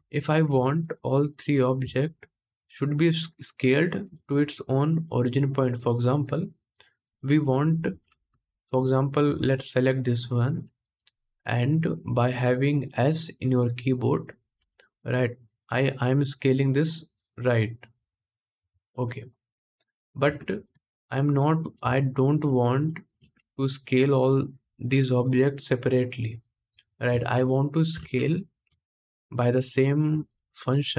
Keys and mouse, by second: 0.0 alt+a, 1.1 middle click, 2.0 shift+click, 2.1-3.4 shift+middle drag, 3.4-6.2 drag, 7.8 alt+a, 9.0 2, 9.7-24.0 middle drag, 14.3 s, 20.0 ctrl+z, 22.9 ctrl+Tab, 24.0-28.1 drag, 26.8 Tab, 27.7 alt+a, 28.1-30.9 shift+middle drag.